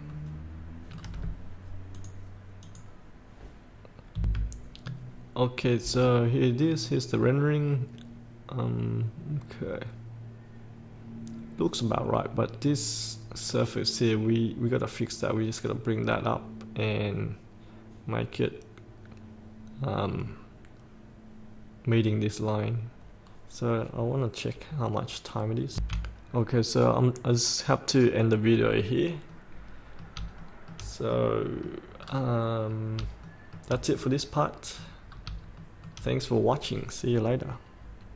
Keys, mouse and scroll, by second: 2.1-4.1 drag, 4.3 F8, 26.5-27.2 scroll up 1, 29.4 middle click, 31.1 scroll up 1, 31.2 middle click, 32.2 scroll down 1, 32.8 scroll up 1, 33.5 shift+middle click, 34.1 middle click, 35.1 middle click, 35.2 scroll down 1, 35.7 shift+middle click.